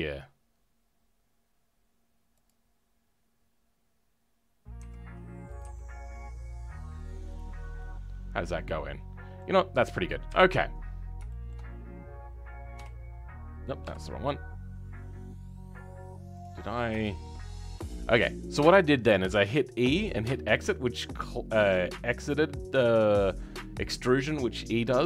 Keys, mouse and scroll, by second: 7.5 scroll down 4, 7.7-10.2 middle drag, 10.2 KP_3, 10.7 scroll down 2, 11.2-16.3 shift+middle drag, 16.3 click, 16.6-16.9 scroll up 2, 16.9 shift+middle click, 17.4-21.4 scroll up 8, 21.4-25.0 scroll up 1.